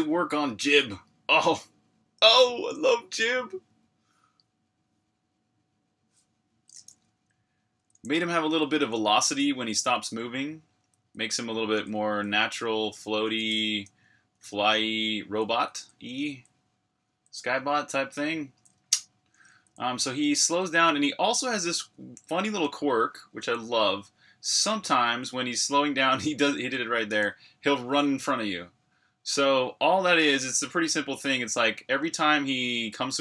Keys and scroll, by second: 7.6-13.5 typing, 14.6 typing, 17.3-18.7 typing, 21.7-25.6 typing, 29.1-33.2 typing.